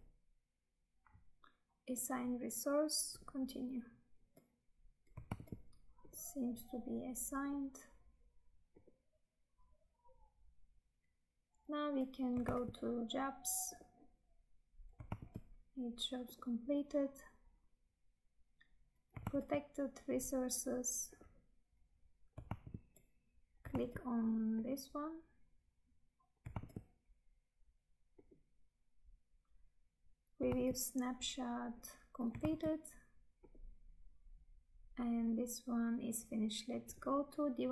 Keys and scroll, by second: 5.5 Tab, 12.6 Tab, 15.3 Tab, 19.5 Tab, 22.6 Tab, 26.6 Tab, 30.6 Tab, 32.6 Tab.